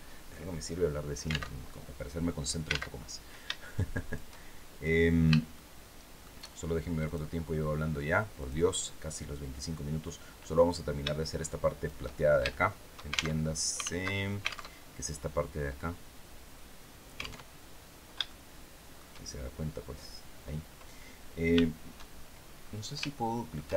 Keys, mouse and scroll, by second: 1.2 alt+Tab, 2.6 alt+Tab, 3.4 shift+click, 5.2 shift+middle click, 6.7 click, 8.1 click, 11.1 shift+click, 12.2 shift+middle click, 13.0 alt+shift+Tab, 13.7 alt+Tab, 17.1 alt+Tab, 17.9 shift+middle click, 19.8 scroll down 2, 21.8-22.5 shift+scroll down 4, 22.8 shift+middle click, 23.5 shift+scroll up 2.